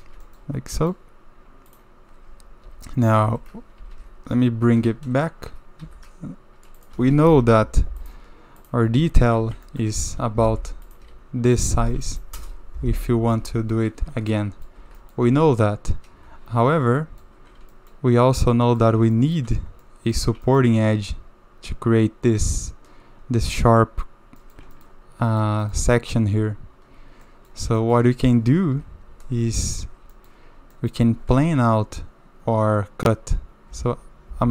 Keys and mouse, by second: 0.2 shift+middle drag, 0.8 middle drag, 1.7 click, 2.3 Tab, 2.6 Tab, 3.2 Tab, 3.8 Tab, 3.9 KP_7, 5.8 KP_7, 6.8 click, 6.9 g, 8.9 Tab, 9.2 a, 9.4 a, 9.7 shift+click, 10.2 k, 14.1 Tab, 14.3-14.6 drag, 14.8 Tab, 15.0 click, 15.2 3, 17.0 middle click, 17.7 shift+middle click, 18.5 click, 19.1 shift+middle click, 19.8 click, 20.5 shift+middle click, 24.4 click, 24.8 shift+middle drag, 25.4 middle click, 25.6 shift+middle drag, 27.2 middle drag, 27.8 shift+middle click, 28.7 KP_7, 29.5 shift+middle click, 30.1 shift+middle click, 30.7 shift+middle click, 33.7 k.